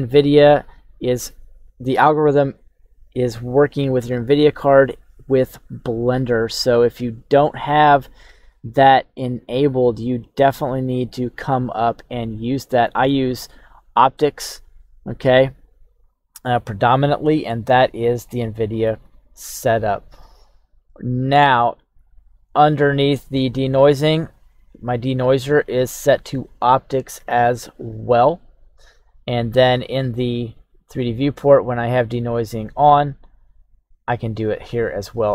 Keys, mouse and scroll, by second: 7.2-8.5 drag, 20.2 click, 23.3 click, 24.5 click, 27.1 click, 29.8 click, 31.2 click, 33.3 click, 33.7 click.